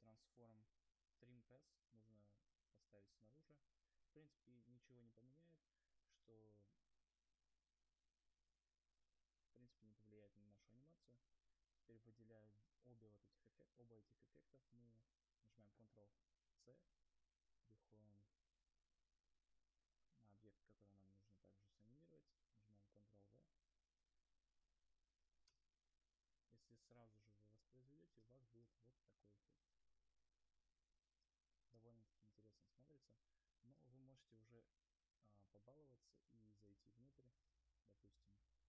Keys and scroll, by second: 12.3 ctrl+c, 16.1 ctrl+c, 24.7 ctrl+v, 28.1 0, 28.9 0.